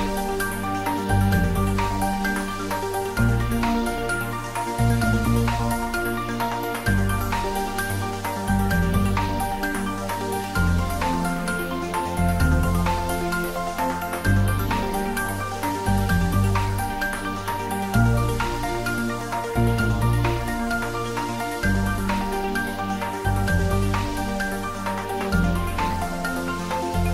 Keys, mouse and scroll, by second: 3.3 click, 6.1 click, 7.4 shift+click, 10.3 ctrl+z, 10.7 ctrl+middle click, 11.5 ctrl+middle click, 12.4 click, 13.4 shift+click, 14.6 ctrl+z, 15.1-15.7 shift+drag, 16.0 shift+click, 16.8 ctrl+j, 17.7 ctrl+s, 18.1 click, 18.5 shift+click, 19.4 ctrl+z, 20.1 shift+click, 20.6 shift+click, 22.1 shift+click, 23.0 ctrl+j, 24.3 ctrl+s, 25.1 click.